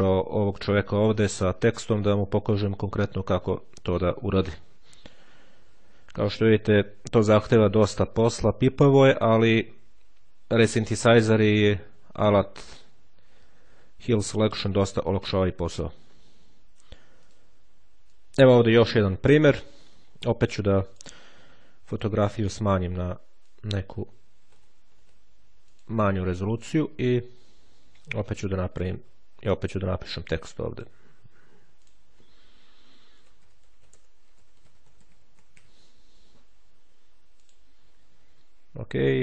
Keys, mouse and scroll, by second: 10.6 click, 15.4 click, 16.5-17.7 drag, 17.9 click, 20.7 click, 21.7 click, 23.3 click, 24.3 KP_8, 24.5 KP_0, 25.5 click, 26.5 click, 28.1-29.4 ctrl+scroll up 1, 30.6 click, 31.7 click, 32.6-36.0 typing, 37.3 click.